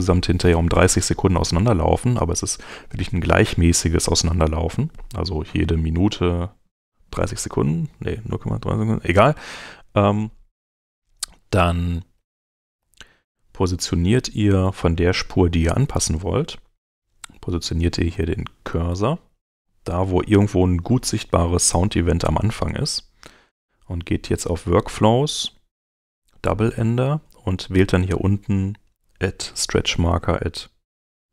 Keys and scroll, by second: 11.7 Right, 12.8 Left.